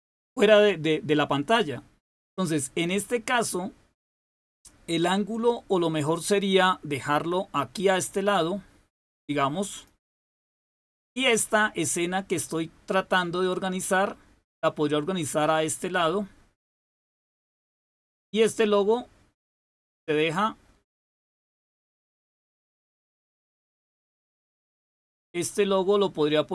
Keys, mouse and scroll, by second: 4.9-9.8 drag, 10.8 click, 12.2-17.1 drag, 17.8 click, 18.4-21.9 drag, 22.6 click, 23.7 click, 24.3 click, 25.0-26.5 drag.